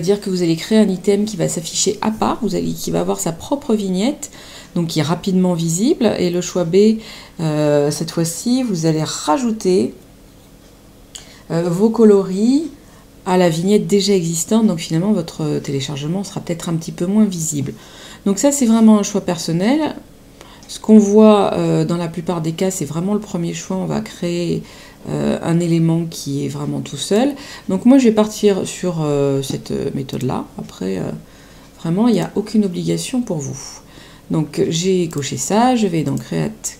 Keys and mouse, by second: 27.0 click, 30.1 click, 32.1 click, 35.1 click.